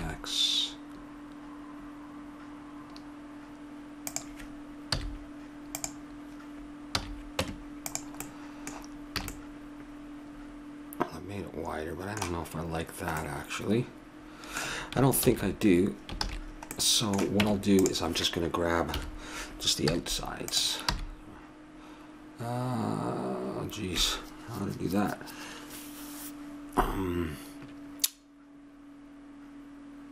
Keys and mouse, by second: 4.9 z, 6.9 a, 7.5 Tab, 8.2 middle click, 9.2 a, 13.2 middle click, 15.2 ctrl+z, 16.2 ctrl+z, 17.4 Tab, 18.9 KP_7, 19.9 z, 21.0 b.